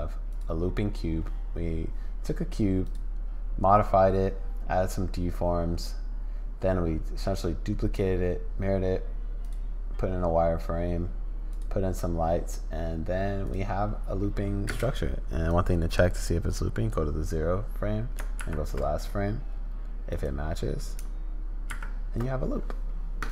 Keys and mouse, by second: 0.3 click, 2.8 click, 9.4 click, 11.5 click, 13.4 click, 14.7 space, 15.5-16.9 drag, 18.4 shift+Right, 20.1 click, 21.7 shift+Right.